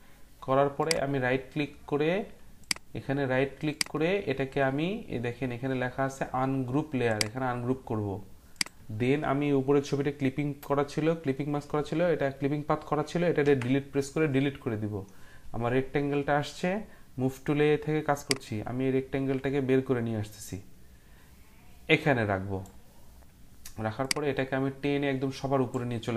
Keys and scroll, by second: 13.4 Delete.